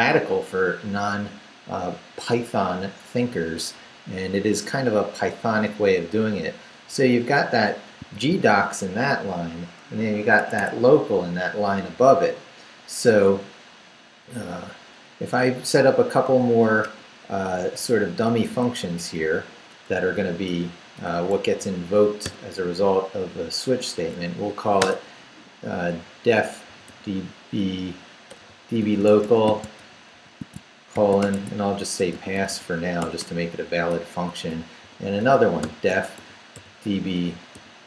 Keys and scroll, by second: 8.1 shift+v, 10.4 Escape, 12.0 Down, 13.9 Down, 14.8 Down, 15.2 Up, 16.3 i, 16.6 Return, 17.5 Down, 18.2 Up, 20.1-22.2 typing, 24.8 space, 26.4-32.7 typing, 31.2 shift+Return, 31.3 Tab, 33.0 Return, 33.9-37.8 typing.